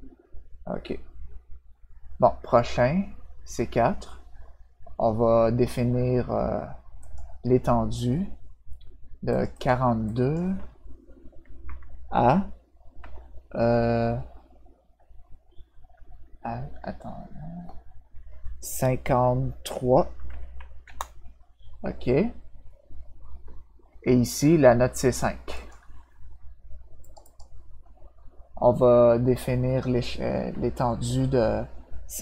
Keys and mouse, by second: 7.0 click, 9.3 click, 9.5 click, 10.0 click, 12.9 -, 20.8 Return, 25.5 click, 27.0 click, 27.2 click.